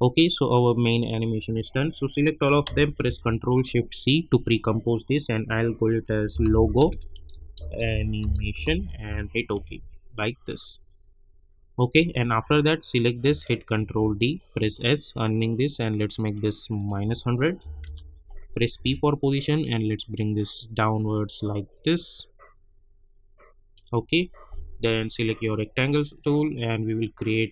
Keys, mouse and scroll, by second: 0.6-2.9 drag, 2.9 ctrl+shift+c, 5.8-9.5 typing, 11.9 space, 12.9 click, 13.7 ctrl+d, 14.5 s, 15.1 click, 17.6 -, 17.8 Return, 18.7 p, 19.5-27.5 drag.